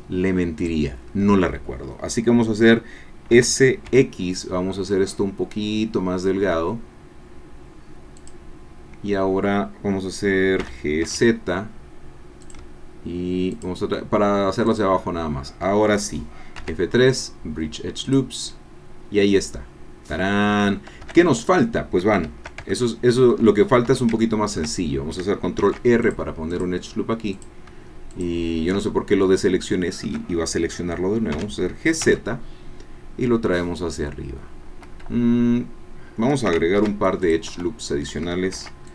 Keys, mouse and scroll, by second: 0.6 shift+click, 3.3 s, 3.9 x, 8.2-10.6 drag, 10.6 g, 11.0 z, 12.4 shift+click, 16.6 F3, 19.0-19.4 scroll down 1, 19.5-20.7 drag, 20.7 scroll up 1, 21.0 shift+Caps_Lock, 22.6 shift+Caps_Lock, 22.7 shift+click, 23.5 click, 24.2 shift+click, 24.8 shift+scroll up 2, 25.6 ctrl+r, 26.0 ctrl+click, 26.5 ctrl+click, 27.6 click, 29.2 shift+click, 29.3 shift+scroll down 2, 31.4 g, 32.0 z, 34.8 Escape, 36.8 ctrl+r, 37.2 ctrl+click, 37.5 ctrl+Escape, 38.5 ctrl+r, 38.8 ctrl+click.